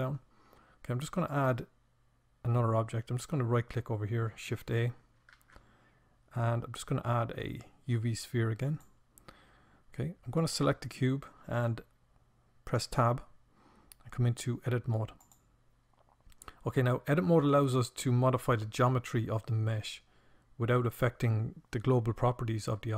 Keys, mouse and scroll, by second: 0.2-3.8 drag, 4.2 shift+a, 11.5 Tab.